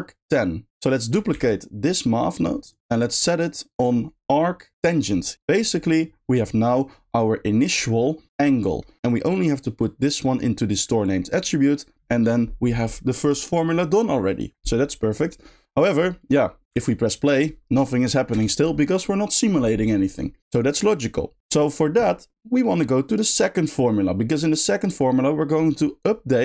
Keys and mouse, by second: 0.7 x, 2.4 shift+click, 2.6 shift+click, 8.9 middle click, 9.2 click, 9.8 click, 10.0-10.7 drag, 16.7 space, 18.6 click, 21.0 middle click, 22.3-23.3 middle drag.